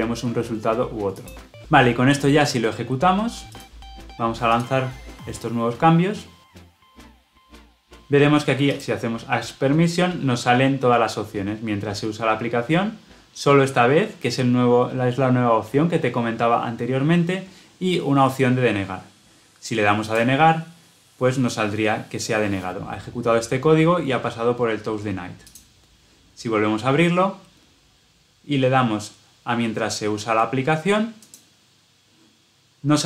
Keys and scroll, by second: 4.5 shift+F10.